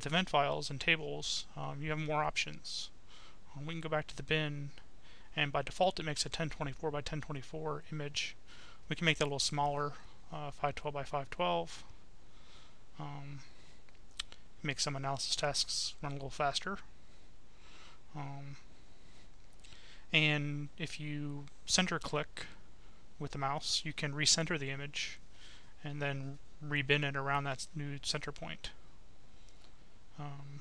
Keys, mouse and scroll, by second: 0.4 click, 1.4 click, 1.8 right click, 4.1 click, 9.1 click, 10.0-12.7 right drag, 14.6 middle click, 17.4 click, 18.9 click, 22.1-22.6 scroll down 1, 23.7-24.2 scroll up 1, 24.9-25.4 scroll up 1, 26.0-26.5 scroll down 2, 27.7 click, 28.9 click.